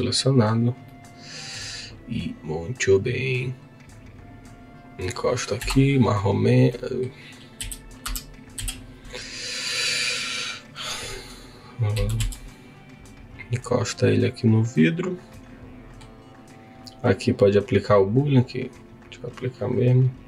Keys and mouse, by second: 0.8 middle click, 0.9 click, 1.1 middle click, 3.0 click, 5.5 KP_7, 6.7 middle click, 6.9 click, 7.5 KP_3, 8.0 KP_1, 8.5 KP_3, 11.9 g, 12.2 y, 14.7 click, 15.3 middle click, 15.6 click, 15.7 middle click, 15.9 click, 17.9 click, 19.7 click.